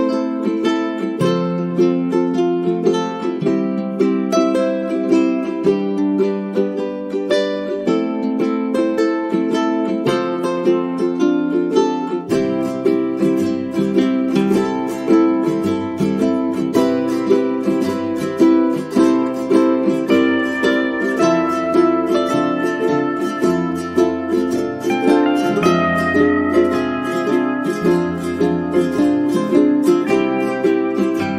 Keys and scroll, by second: 30.5 ctrl+shift+Right.